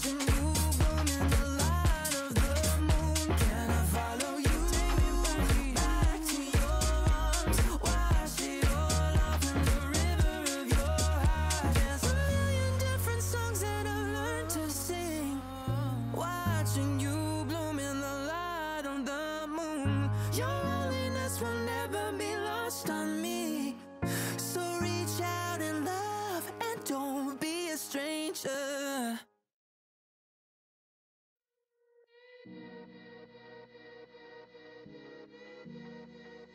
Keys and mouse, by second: 0.0 space, 1.8 x, 2.0 click, 2.5 click, 2.8 space, 2.8 click, 3.5 click, 3.9 x, 4.2 click, 4.7 ctrl+z, 5.3 click, 5.6 shift+click, 8.4 ctrl+z, 9.7 click, 9.9 Delete, 10.1 click, 12.0 Return, 12.3 ctrl+j, 12.7 click, 14.2 ctrl+[, 14.9 click, 16.8 click, 18.0 click, 18.5 Return, 19.0 click, 19.5 click, 19.8 click, 20.3 click, 20.4 click, 20.5 click, 21.3 click, 21.5 click, 21.7 x, 21.8 click, 22.2 click, 22.3 x, 22.4 click, 22.6 x, 23.0 click, 23.2 click, 23.6 click, 24.2 x, 24.2 click, 26.0 click, 26.9 click, 27.7 click, 28.0 click, 28.3 click, 29.2 click, 29.6 click, 30.7 click, 30.9 click, 31.1 click, 32.3 click, 32.9 click, 34.0 click, 36.2 click.